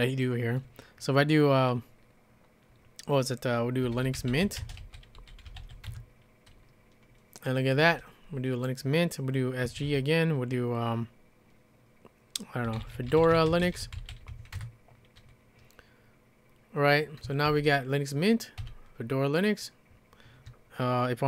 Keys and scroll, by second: 3.6-6.1 typing, 9.4-10.4 typing, 12.4-14.8 typing, 17.3-18.6 typing.